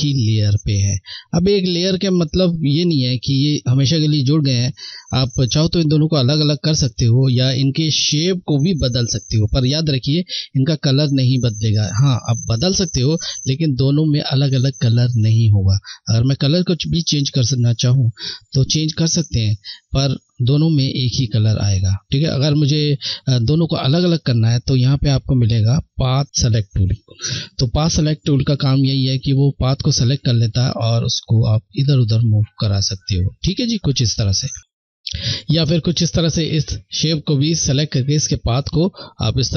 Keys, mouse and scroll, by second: 15.8 click, 17.5 click, 24.4 click, 24.7 click, 26.8 click, 35.0 click.